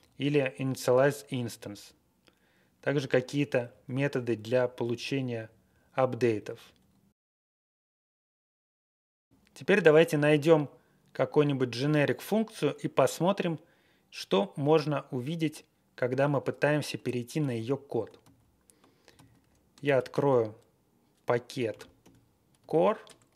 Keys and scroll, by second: 0.6 Right, 1.3 Up, 2.7 Up, 3.8 Down, 4.1 Down, 5.1 Down, 5.4 Down, 5.8 Down, 6.2 Up, 15.1 Down, 17.4 ctrl+a, 18.2 ctrl+v, 19.1 alt+v, 19.8 ctrl+x, 20.1 ctrl+f, 21.7-23.0 typing.